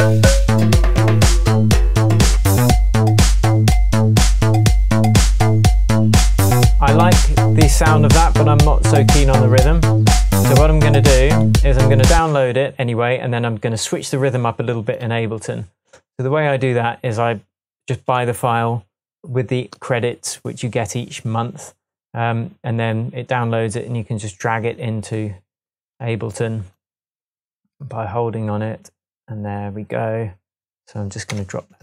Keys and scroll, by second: 12.2 space, 31.3 Tab.